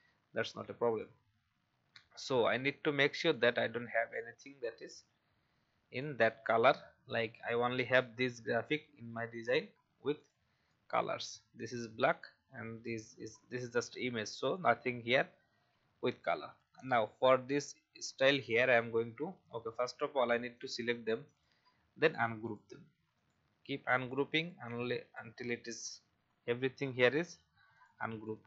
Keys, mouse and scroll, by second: 1.7 alt+scroll down 1, 3.3-4.5 drag, 4.7 Delete, 5.9 click, 11.6 Delete, 13.7 Delete, 14.5 click, 15.7 alt+scroll up 1, 16.6-18.4 scroll down 1, 18.4 click, 19.3 typing, 19.7 scroll down 1, 20.5 click, 21.3 right click, 22.0 click, 25.6 right click, 27.7 click.